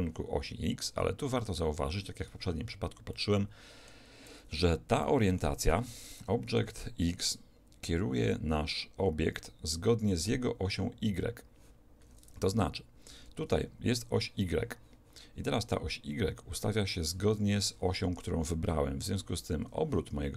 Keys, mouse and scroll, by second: 3.2-6.8 middle drag, 5.7 alt+a, 13.4 2.